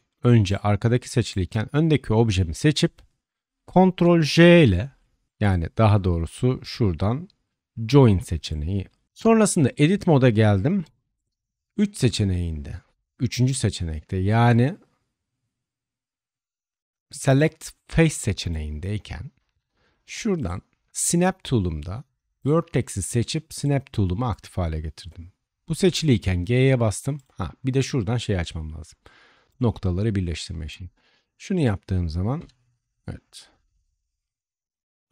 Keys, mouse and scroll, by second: 1.2 shift+click, 3.6-9.0 ctrl+drag, 3.6-5.3 ctrl+right drag, 4.8 ctrl+j, 9.0 middle click, 9.0-35.1 drag, 9.1 Tab, 10.8 3, 20.5-23.0 middle drag, 20.5-23.0 right drag, 23.5-25.7 middle drag, 23.5-25.7 right drag, 25.7 g, 29.4 middle click, 29.4 right click, 30.6 g, 32.3 Tab.